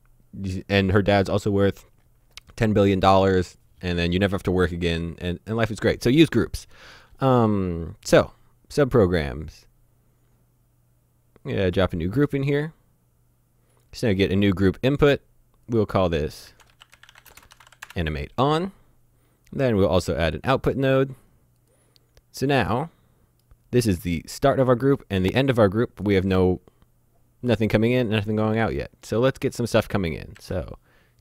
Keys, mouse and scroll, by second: 11.7 click, 13.8 click, 15.7 click, 16.4-17.7 typing, 17.9 Return, 20.3 click, 22.2-22.7 scroll down 1, 22.7 middle click, 23.9 click, 28.6 middle click, 29.7 click, 30.4 shift+a.